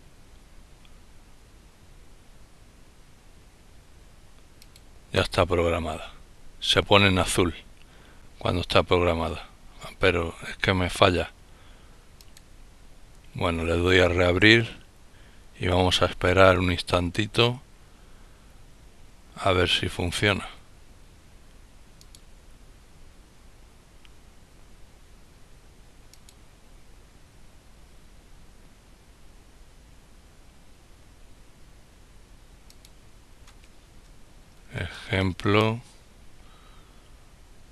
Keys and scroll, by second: 32.2-34.2 typing.